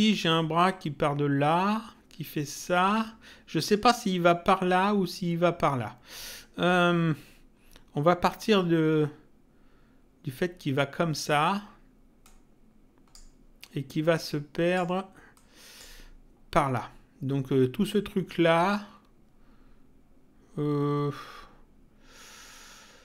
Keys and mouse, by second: 12.2 click, 14.1 click, 15.3 click.